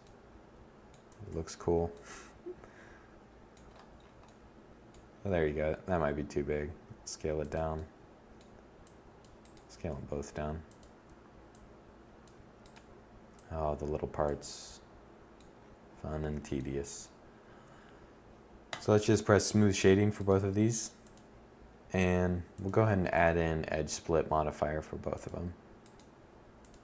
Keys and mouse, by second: 4.3 s, 5.9-6.2 drag, 7.8 right drag, 8.1 s, 9.0 click, 19.4-23.6 middle drag.